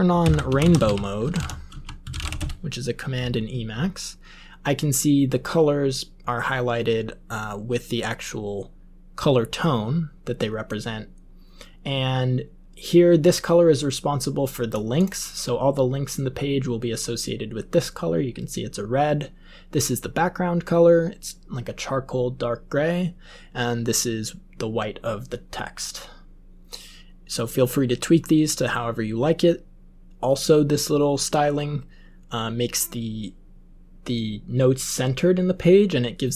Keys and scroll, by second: 0.2 alt+x, 0.2-2.8 typing.